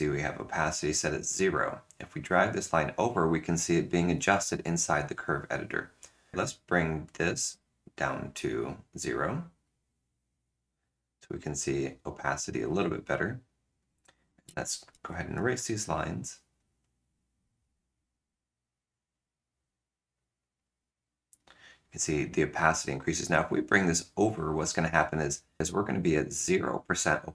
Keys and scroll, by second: 14.7 ctrl+z, 14.9 ctrl+z, 15.1 ctrl+z, 15.3 ctrl+z, 15.4 ctrl+z, 15.6 ctrl+z, 15.9 ctrl+z.